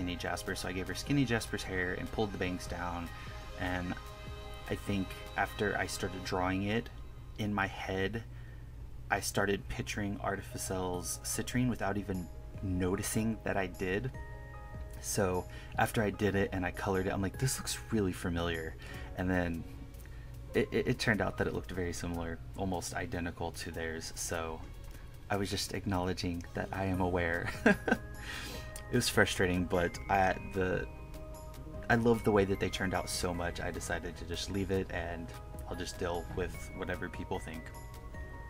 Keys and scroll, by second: 0.5 KP_Subtract, 1.3 KP_Add, 1.9 KP_Subtract, 6.0 1, 6.9 1, 8.0 1, 10.0 KP_Add, 10.1 1, 10.6 KP_Subtract, 10.7 KP_Add, 10.8 KP_Subtract, 11.1 1, 11.8 1, 13.1 1, 13.3 1, 13.4 KP_Subtract, 16.2 1, 16.7 KP_Add, 20.2 KP_Add, 21.5 KP_Add, 22.0 KP_Subtract, 22.6 KP_Subtract, 22.8 KP_Add, 23.3 KP_Subtract, 23.8 KP_Subtract, 24.0 KP_Add, 24.2 KP_Subtract, 24.3 KP_Add, 24.4 1, 24.6 KP_Subtract, 24.8 KP_Add, 26.4 1, 27.0 KP_Subtract, 27.3 KP_Add, 27.7 KP_Subtract, 27.9 KP_Subtract, 31.0 1, 31.5 1, 32.6 1, 35.0 KP_Add, 35.7 KP_Subtract, 37.8 KP_Add.